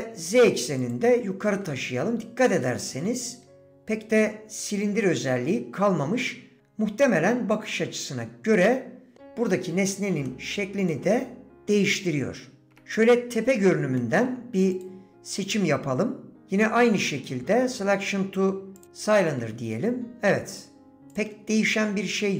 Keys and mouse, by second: 0.9 g, 2.6 shift+middle click, 8.5 middle click, 10.3 middle click, 10.9 middle click, 13.4 KP_7, 14.0 shift+click, 16.5 d, 21.1 click.